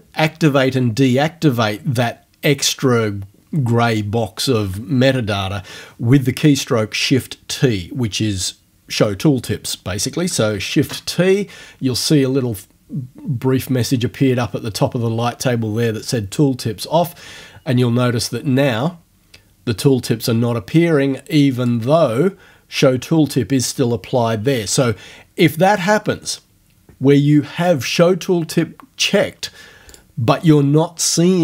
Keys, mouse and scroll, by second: 10.8 shift+t, 21.6 click, 30.0 click.